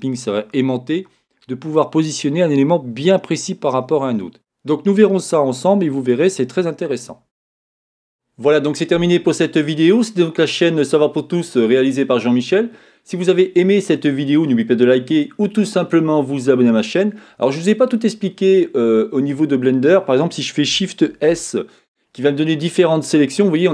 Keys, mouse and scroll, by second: 7.2-10.7 shift+scroll up 1.